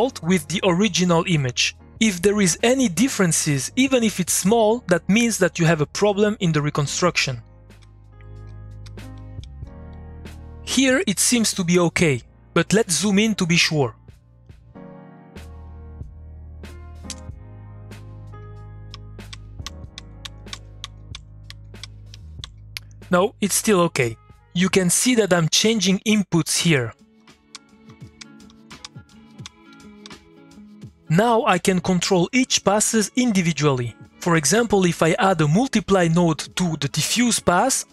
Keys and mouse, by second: 6.3 middle click, 6.8 click, 7.4-10.4 typing, 14.0 middle click, 14.5 click, 14.9 middle click, 15.1 click, 15.3 middle click, 15.7 click, 15.9 middle click, 17.1 space, 17.6-18.9 middle drag, 18.7-22.9 typing, 26.9-30.5 typing, 35.7 middle click, 36.1 click.